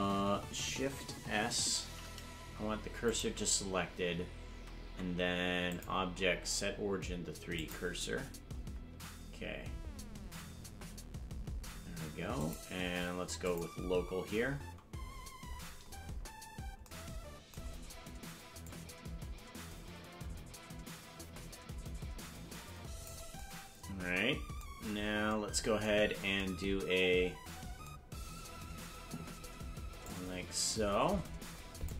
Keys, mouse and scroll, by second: 1.8 shift+s, 4.9 Tab, 5.7-7.7 drag, 8.9 Tab, 10.3 Tab, 12.4-13.7 drag, 15.1-16.7 scroll down 19, 18.7-23.2 drag, 24.8-25.1 scroll up 6, 30.0-31.9 drag.